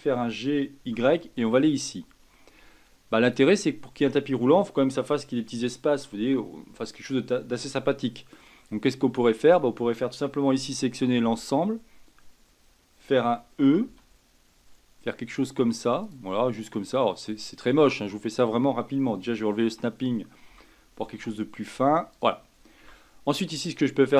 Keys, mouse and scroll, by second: 0.1 g, 8.0 shift+middle click, 8.6-9.1 scroll up 8, 9.1-11.2 shift+middle drag, 11.2 l, 13.8 e, 19.6 shift+Tab, 20.5 g, 22.8 Tab.